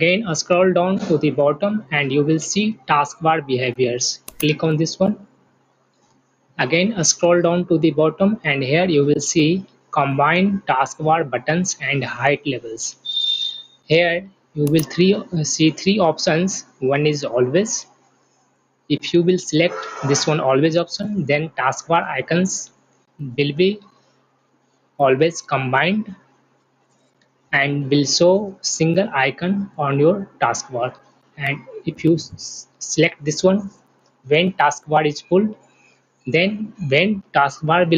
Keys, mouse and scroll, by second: 4.4 click, 14.7 click.